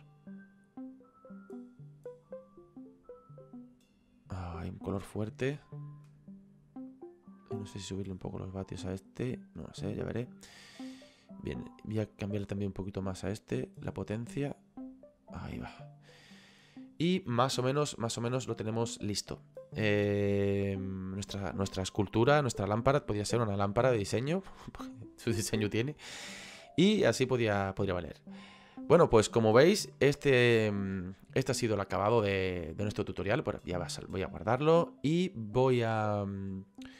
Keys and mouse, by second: 7.0 click, 11.5 click, 12.6 click, 18.0 shift+middle click, 27.6 shift+middle click, 30.0 shift+middle click, 33.5 click, 36.4 click.